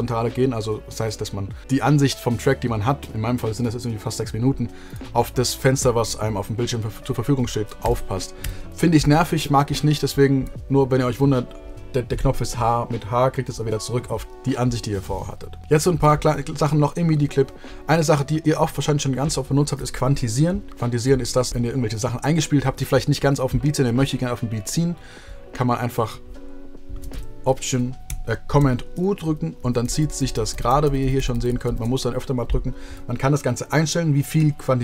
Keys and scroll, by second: 1.6 w, 7.8 w, 8.7 h, 29.2 super+u, 29.5 super+u, 29.7 super+u, 30.1 super+u, 30.5 super+u, 31.6 super+u.